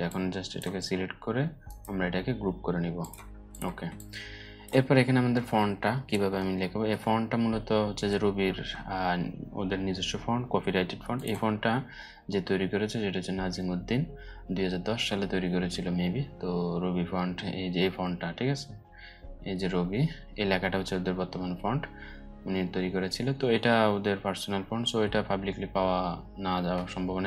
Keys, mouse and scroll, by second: 1.2 right click, 2.5 click, 3.4 space, 3.5-4.4 click, 3.9 space, 5.4-5.7 alt+scroll down 2, 6.1-7.0 alt+scroll up 2, 7.0-7.9 alt+scroll up 1, 10.7 click, 10.9 click, 16.8 scroll down 1, 18.2 scroll down 1, 19.0 scroll down 1, 21.0 scroll down 1, 26.8 click.